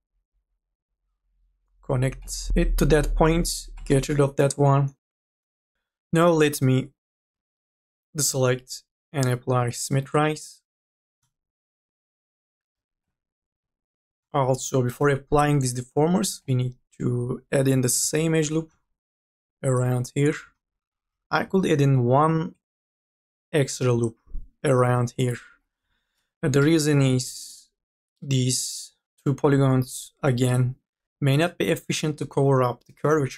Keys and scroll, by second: 5.7 3, 7.5 ctrl+a, 12.3-13.2 typing, 16.1 3, 18.0 k, 18.4 l, 21.1 e, 25.5-27.1 typing.